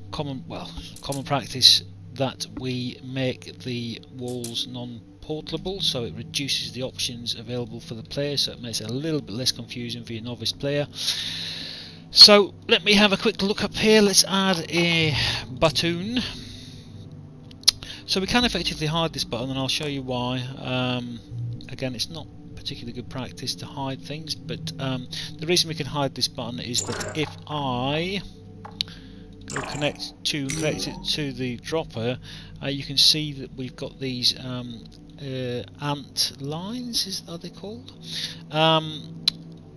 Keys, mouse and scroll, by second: 0.9 click, 2.2 p, 3.2 alt+click, 5.6 p, 6.5 alt+click, 8.1 alt+middle click, 9.0 alt+click, 11.8 alt+middle click, 12.6 alt+right click, 15.5 click, 18.0 click, 19.2 click, 22.9 click, 24.4 alt+click, 26.6 right click, 29.3 click, 30.4 click, 30.9 alt+click, 34.7 alt+click, 37.6 alt+click, 39.6 alt+click.